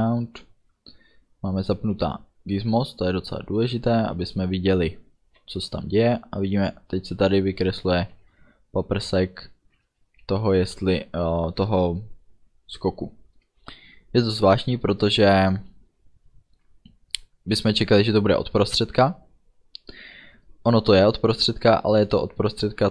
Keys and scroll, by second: 5.5 space, 13.7 space.